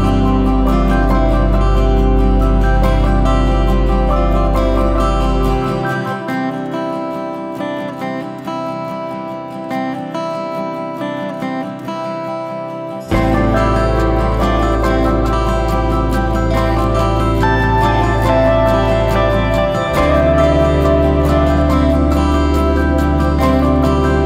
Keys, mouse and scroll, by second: 0.3 click, 0.7-1.3 scroll up 1, 1.3 shift+click, 1.8 shift+click, 3.1 KP_Divide, 3.8 alt+a, 4.6 shift+middle click, 5.1 scroll down 1, 5.3-5.8 scroll up 1, 5.8 click, 6.0 Tab, 6.8 alt+a, 7.2 ctrl+r, 15.1-15.5 scroll up 2, 15.5 shift+middle click, 16.9 click, 17.1 click, 17.2 scroll down 2, 17.4 middle click, 18.2 click, 18.2 scroll up 2, 18.4 shift+middle click, 19.3 scroll up 1, 19.5 ctrl+z, 19.7 ctrl+z, 21.5 click, 22.1 ctrl+z, 22.7 click.